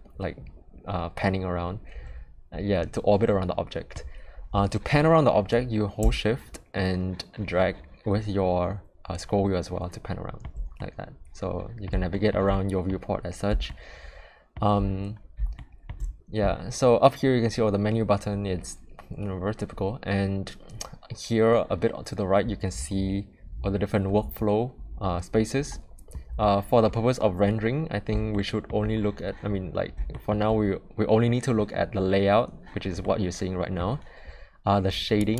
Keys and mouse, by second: 6.7-10.4 shift+middle drag, 10.7-11.8 middle drag, 12.1 shift+middle click, 12.5-12.8 middle drag, 13.6-14.5 shift+middle drag, 15.5-15.8 shift+middle drag, 28.3-28.6 shift+middle drag, 30.1 shift+middle drag, 33.0-33.8 middle drag.